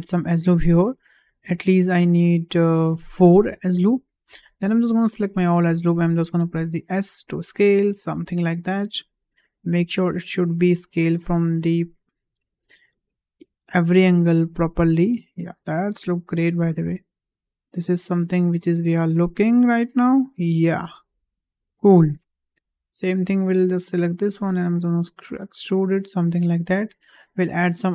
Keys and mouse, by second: 0.0 click, 1.2 click, 1.8 click, 2.4 click, 4.2 click, 4.8 click, 6.2 s, 9.0 click, 9.5 s, 13.2 click, 13.7 s, 16.6 click, 17.1 s, 20.5 click, 20.9 s, 22.2 shift+middle click, 23.5 click, 24.2 s.